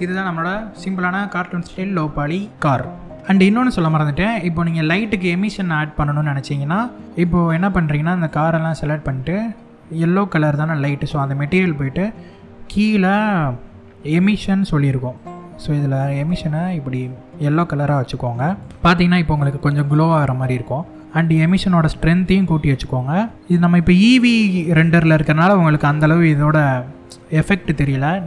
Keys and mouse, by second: 4.5-5.3 middle drag, 7.8 click, 10.7 click, 22.0-25.7 drag, 26.3 middle click.